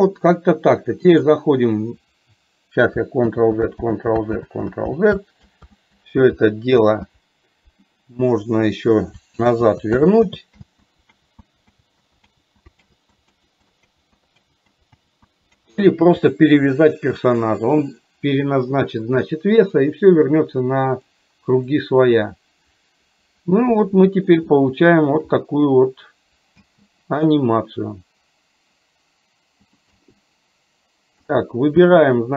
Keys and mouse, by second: 1.1 click, 21.0-22.0 drag, 23.7 shift+middle click, 24.6 shift+middle click, 29.9 click.